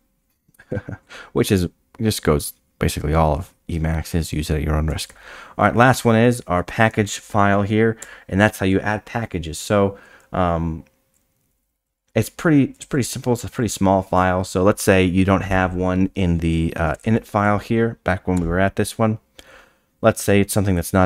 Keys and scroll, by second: 8.0 Down, 16.8 space, 16.9 f.